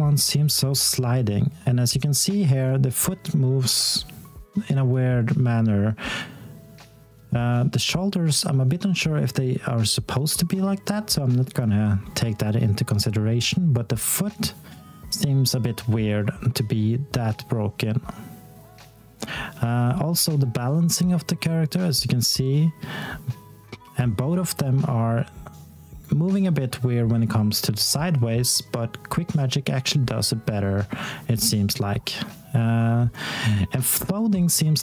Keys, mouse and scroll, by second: 0.2 click, 1.6 alt+click, 3.8 scroll up 1, 4.3 alt+middle click, 4.8 alt+click, 7.1 alt+middle click, 7.6 alt+click, 11.8 scroll down 1, 12.2 alt+click, 12.7 alt+middle click, 13.2 alt+click, 17.8 alt+middle click, 21.1 d, 23.2 alt+d, 27.2 a, 29.4 alt+click, 31.3 alt+middle click, 31.8 alt+click, 33.8-34.8 scroll down 1.